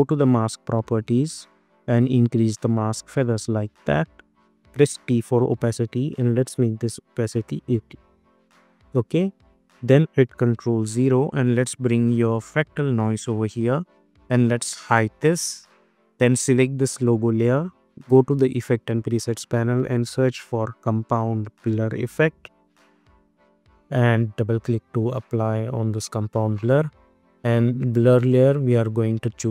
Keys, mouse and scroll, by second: 4.8 t, 6.2 click, 7.7 Return, 9.7 click, 12.7-15.2 drag, 18.9 click, 19.3 ctrl+a, 19.8-21.0 typing, 22.8 typing, 25.8 click.